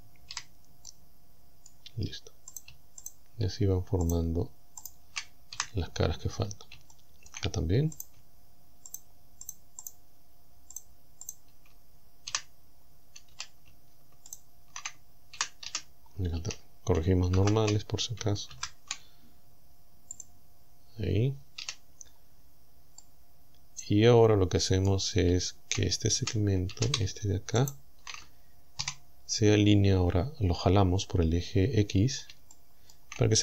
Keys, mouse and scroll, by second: 0.3 f, 0.9-1.9 middle drag, 2.5 shift+right click, 3.1 shift+right click, 4.1 shift+right click, 4.9 shift+right click, 5.5 f, 6.0-6.8 scroll up 2, 6.9 shift+middle click, 8.0 right click, 8.9 shift+right click, 9.5 shift+right click, 9.9 shift+right click, 10.8 shift+right click, 11.3 shift+right click, 12.3 f, 12.8 scroll down 2, 13.1 middle click, 13.3 a, 14.3 alt+shift+right click, 15.4 f, 15.7 a, 16.1 scroll down 1, 16.4 a, 17.4 ctrl+n, 18.5 ctrl+n, 20.2 click, 21.7 a, 22.1-22.7 scroll down 2, 23.0-24.1 middle drag, 24.1 click, 26.2 shift+a, 27.7 alt+shift+right click, 28.8 KP_7, 30.3-30.7 scroll up 2, 31.9-32.2 scroll up 2, 32.2 scroll down 3, 32.5 shift+middle click, 32.6 shift+click, 33.1 shift+scroll down 2.